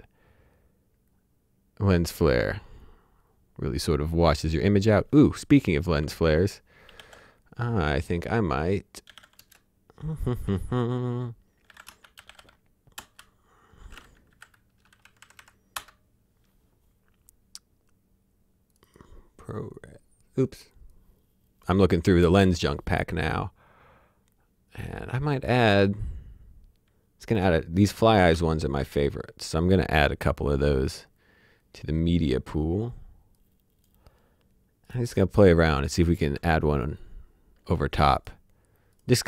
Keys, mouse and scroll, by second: 2.2-3.9 scroll up 1, 6.9 e, 8.8-9.6 typing, 11.5-12.8 typing, 12.9 Return, 14.3 KP_4, 15.0 Left, 15.7 Return, 20.1-20.9 scroll down 1, 20.9 click, 21.9-23.2 scroll down 1, 23.2-24.8 scroll up 1, 27.2 scroll up 1, 28.1 shift+click, 29.0 click, 30.7 click, 33.3 click, 37.5 scroll down 1, 38.1 click.